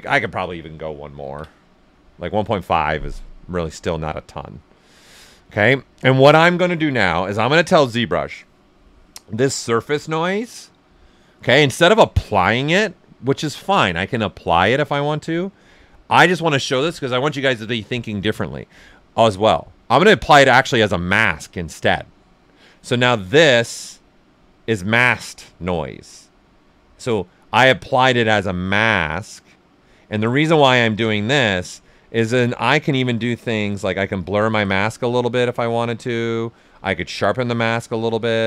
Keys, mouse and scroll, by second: 3.0 ctrl+d, 3.1-4.7 right drag, 4.5 typing, 5.9-20.0 drag, 23.7 click, 23.9 ctrl+click, 27.7-31.5 ctrl+right drag, 31.5 ctrl+right click, 32.5 s, 32.6-34.1 drag, 35.9 ctrl+z, 36.6 ctrl+shift+z, 37.0 ctrl+shift+click, 37.1 ctrl+shift+z.